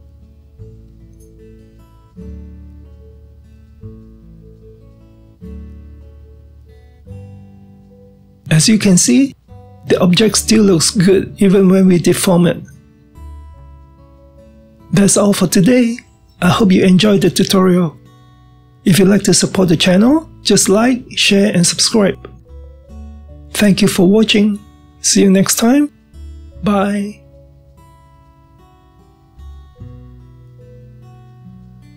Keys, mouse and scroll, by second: 3.3-5.7 middle drag, 5.7-8.7 drag, 9.0-12.0 drag, 12.0-25.0 middle drag, 25.4-26.2 scroll down 1, 26.2-29.1 middle drag.